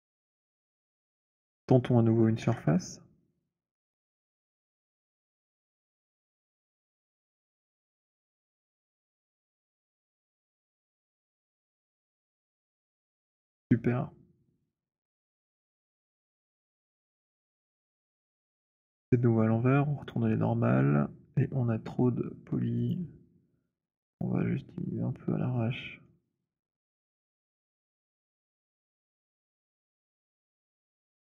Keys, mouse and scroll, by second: 0.5 alt+click, 1.3 alt+middle click, 1.3 alt+right click, 2.3 ctrl+s, 4.4 click, 6.6 shift+click, 7.8 click, 8.9 shift+click, 10.1 click, 12.0 click, 16.7 right click, 20.0 click, 22.9 click, 24.2 click, 25.9 middle click, 28.1 middle click, 28.8 middle click, 30.5 click.